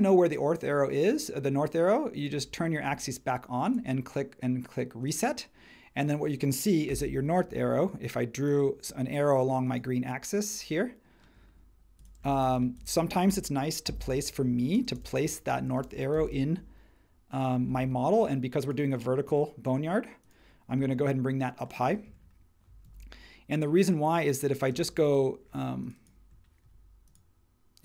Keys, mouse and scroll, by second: 6.9 l, 12.4 space, 13.8 super+g, 14.7 space, 16.1 m, 20.7 space, 22.8 super+1, 24.7 space.